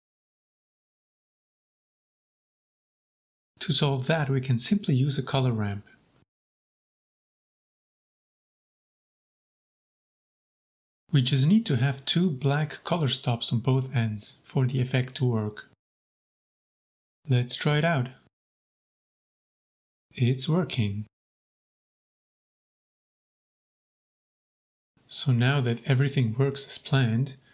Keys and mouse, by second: 0.0 shift+middle click, 0.6 g, 0.7 z, 2.7 shift+middle click, 3.3 shift+a, 8.6 click, 9.4 click, 10.6-11.0 drag, 11.4 click, 12.2-12.7 drag, 13.1 click, 15.2 click, 15.7-16.8 drag, 17.4-17.9 shift+middle drag, 18.4 g, 18.5 z, 21.8 click, 22.9-23.7 middle drag, 24.6 click, 25.0 middle click, 25.6 click, 27.2 shift+a.